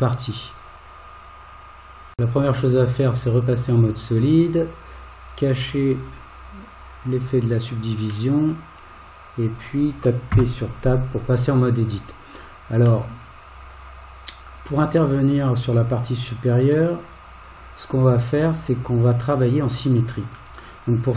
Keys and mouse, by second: 3.7 click, 5.7 click, 7.0 click, 8.3-9.7 middle drag, 10.3 Tab, 13.1-20.3 middle drag.